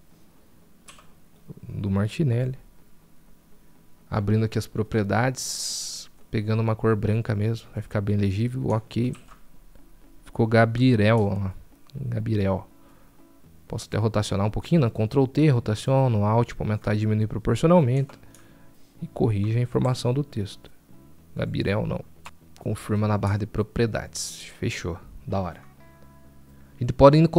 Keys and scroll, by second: 14.4 ctrl+t, 18.2 ctrl+t.